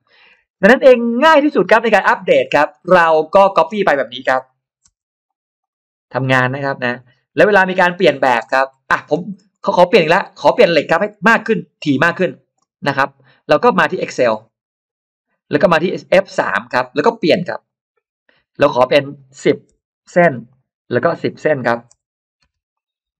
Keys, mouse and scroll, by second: 2.3 middle click, 2.7 scroll down 2, 2.8 space, 3.0 click, 3.4 scroll down 1, 4.1 m, 4.3 click, 5.1 click, 5.5 click, 6.0 click, 6.3 click, 6.7 click, 7.0 click, 7.6 click, 7.9 middle click, 8.3 space, 8.3-9.9 scroll up 4, 9.9 middle click, 10.9 scroll up 1, 14.2 click, 16.3 click, 17.5 click, 18.7 click, 19.6 1, 20.3 click, 20.9 click, 22.6 click.